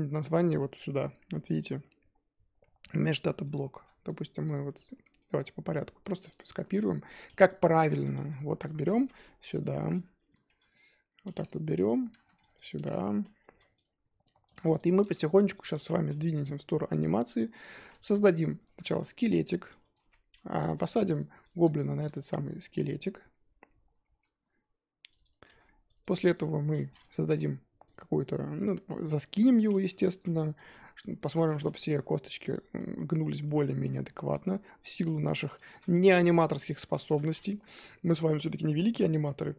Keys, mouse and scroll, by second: 3.6-4.0 shift+middle drag, 4.0 click, 5.0-5.3 shift+middle drag, 5.3 scroll down 1, 5.6-6.1 scroll up 2, 6.3 click, 6.6 shift+middle click, 7.6 click, 10.5 click, 11.8 click, 12.5-13.8 drag, 14.7 click, 15.5-16.7 drag, 17.2-18.3 shift+middle drag, 18.4 click, 20.6-21.1 drag, 21.8-25.1 shift+middle drag, 25.2 click, 26.0 click, 27.2 click, 29.8 click, 30.7 click, 31.8 click, 32.8-34.4 middle drag, 34.4 click, 35.5 click, 36.5 click, 37.6 click.